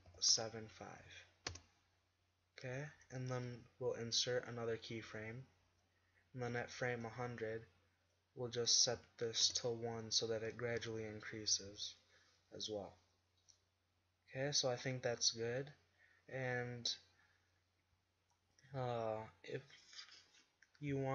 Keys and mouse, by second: 6.7-18.5 drag.